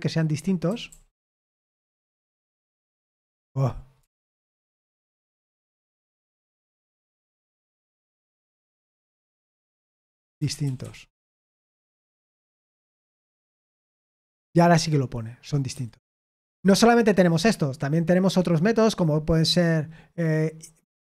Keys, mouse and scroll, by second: 0.0-1.1 typing, 1.4 Escape, 2.4-3.2 typing, 6.5-12.8 typing, 13.6 F5, 15.7 Escape.